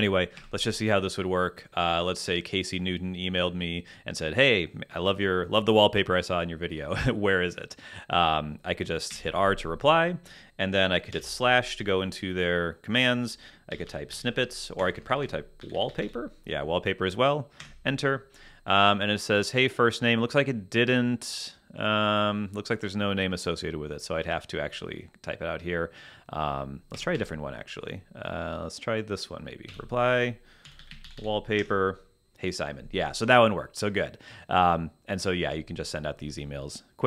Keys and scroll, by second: 0.4 Escape, 9.1 r, 11.1 /, 13.4-16.4 typing, 17.6 Return, 26.9 Escape, 29.7-31.5 typing, 31.6 Return.